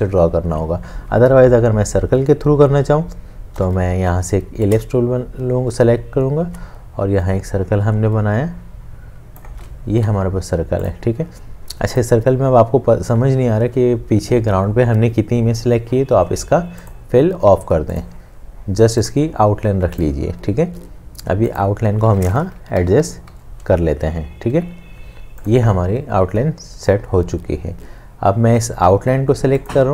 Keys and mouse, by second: 3.6 l, 4.9 shift+click, 5.7 shift+space, 9.4 shift+space, 10.0 v, 22.9 Left, 24.5 Right.